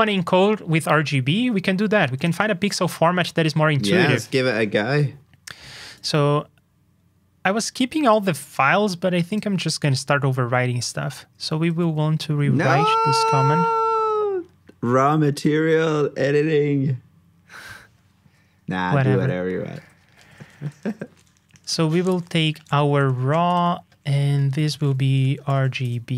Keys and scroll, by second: 11.6 super+c, 20.0 alt+shift+Down.